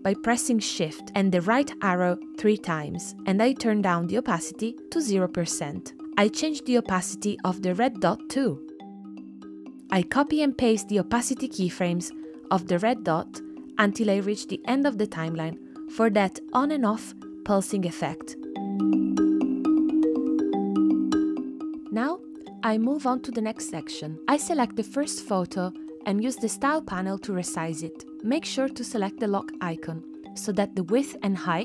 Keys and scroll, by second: 0.6 shift+Right, 1.2 shift+Right, 1.8 shift+Right, 8.4 space, 9.6 space, 12.3 super+c, 13.3 super+v, 14.3 super+c, 14.5 super+v, 15.7 super+v, 16.5 super+v, 16.9 space.